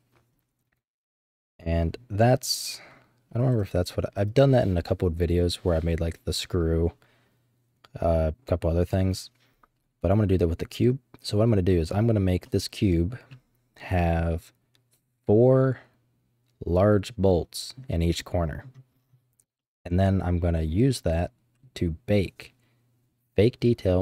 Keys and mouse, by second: 10.3-11.5 middle drag, 12.4 middle click, 13.8 middle click, 17.3-17.8 middle drag, 18.2 middle click, 19.6-21.6 middle drag.